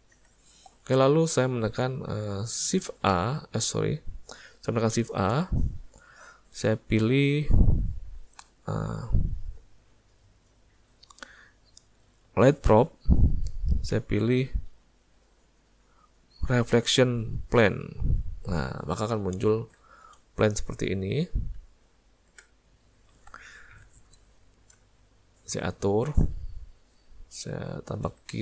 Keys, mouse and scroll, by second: 0.2 alt+a, 1.0 ctrl+middle click, 3.2 shift+s, 5.1 shift+a, 19.2 ctrl+middle click, 20.0 shift+middle click, 20.4 middle click, 21.6 z, 24.3 middle click, 26.1 click.